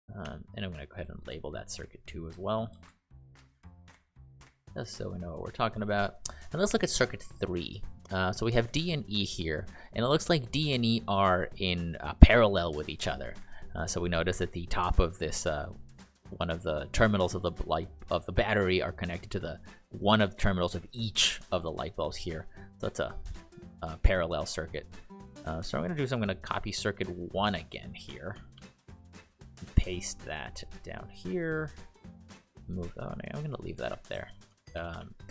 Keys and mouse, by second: 0.2 t, 0.9 click, 2.4-4.7 typing, 5.4 click, 25.3 click, 27.2 click, 28.5 ctrl+c, 28.7 ctrl+v, 31.1 click, 33.7 click, 34.7 ctrl+c, 34.9 ctrl+v.